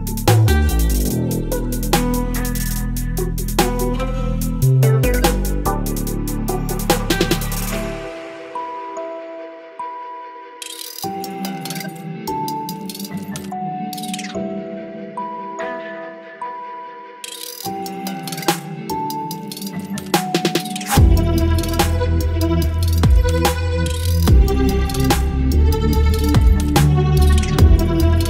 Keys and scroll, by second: 0.2 ctrl+BackSpace, 1.5 ctrl+BackSpace, 4.1 space, 7.4 space, 9.2 Delete, 10.2 Delete, 10.9 Delete, 13.2 Delete, 14.3 Delete, 15.1 Delete, 17.0 ctrl+BackSpace, 17.3 space, 17.9 ctrl+BackSpace, 18.6 ctrl+BackSpace, 19.2 ctrl+BackSpace, 20.0 ctrl+BackSpace, 20.6 space, 22.1 Delete, 22.8 Delete, 23.5 Delete, 24.1 Delete, 26.0 space, 27.0 ctrl+BackSpace.